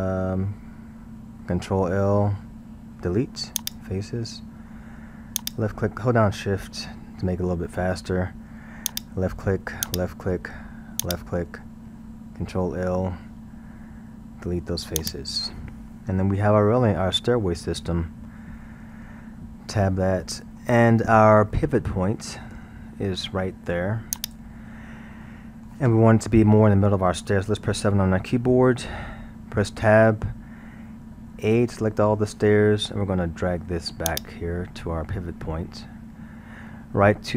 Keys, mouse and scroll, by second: 1.7 ctrl+l, 3.1 Delete, 5.4 click, 8.9 shift+click, 9.8 shift+click, 11.0 shift+click, 12.5 ctrl+l, 14.3 Delete, 15.9-16.6 scroll, 16.6-18.8 middle drag, 18.8 Tab, 19.3-19.7 scroll, 19.7-20.9 middle drag, 20.9 scroll, 21.5-24.2 middle drag, 24.2-24.5 drag, 25.2-27.9 middle drag, 27.9 KP_7, 28.8-29.6 scroll, 29.6 Tab, 31.4 a, 33.1-34.1 scroll, 34.1 click.